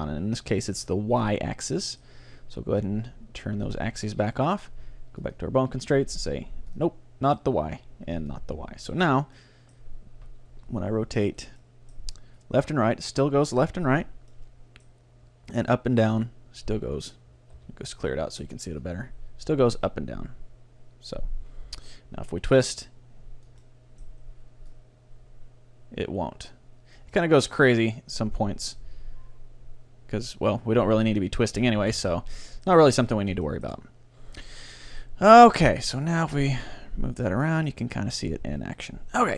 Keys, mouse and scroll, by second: 1.8-3.6 middle drag, 3.7-9.8 drag, 4.4-6.1 right drag, 7.3-9.8 right drag, 9.4 middle click, 10.5 r, 12.4-13.4 middle drag, 12.4-13.4 right drag, 12.4-14.2 drag, 14.3-16.1 middle drag, 15.7-17.5 drag, 17.6 alt+r, 17.8-18.8 middle drag, 18.8-20.6 drag, 18.8 right click, 22.5-24.3 drag, 23.6-25.5 middle drag, 24.7-26.5 drag, 27.1-28.9 middle drag, 27.9-29.7 drag, 32.0 alt+r, 32.3 middle click, 32.8 a, 35.3 click, 35.3 right click, 36.0-37.4 right drag, 36.2 g, 39.1-39.3 middle drag.